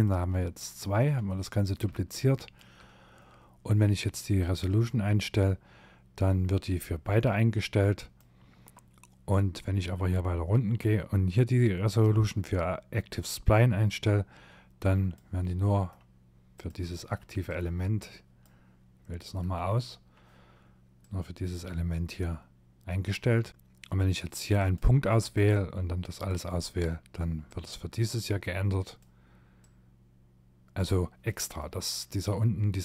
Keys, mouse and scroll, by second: 0.3 middle click, 1.1 shift+middle click, 3.4 click, 8.7 scroll down 1, 12.9 click, 14.6 middle click, 15.5 click, 15.9 middle click, 16.4 click, 18.3 middle click, 20.0 click, 22.7 click, 23.6 click, 24.3 click, 28.6 click, 30.3 middle click, 32.4-32.8 scroll up 4.